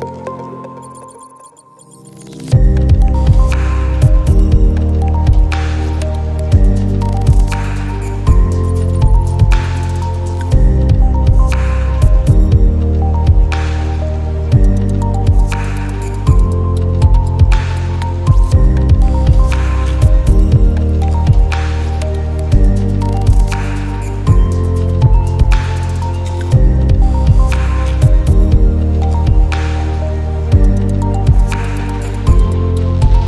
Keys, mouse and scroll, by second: 0.3 click, 2.2 shift+click, 8.2 click, 12.5 click, 22.4 click, 25.6 click, 31.2 click, 32.8 shift+click.